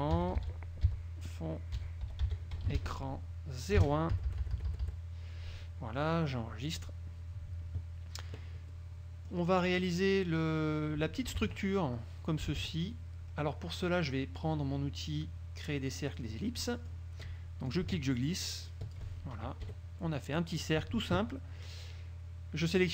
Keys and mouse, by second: 0.0-1.0 typing, 2.2 e, 2.7 r, 3.9 KP_1, 4.3 Delete, 7.0 click, 8.8-9.6 drag, 11.6 alt+Tab, 12.8 alt+Tab, 16.2 click, 16.6 click, 17.8-19.2 ctrl+drag, 19.8 KP_Subtract, 20.5 click.